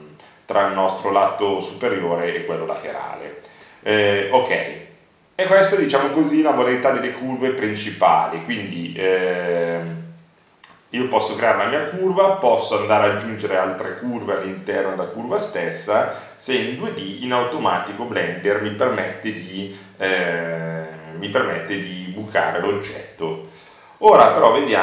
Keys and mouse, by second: 18.1 Tab, 19.3 Delete, 23.7 Tab, 24.0 Tab.